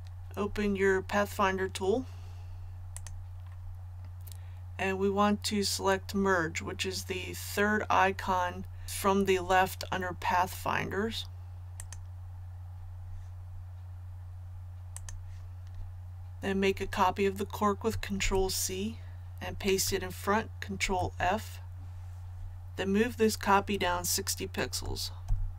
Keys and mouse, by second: 2.9-12.8 drag, 18.2 ctrl+c, 20.8 ctrl+f, 25.2 shift+Up.